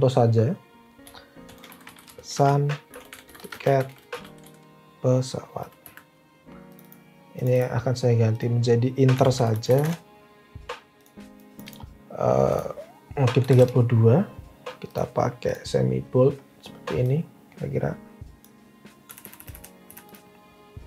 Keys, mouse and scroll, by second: 1.1-6.0 typing, 8.9-10.2 typing, 13.1-13.9 typing, 19.1 Up, 19.2 Up, 19.3 Up, 19.5 Up, 19.8 Up.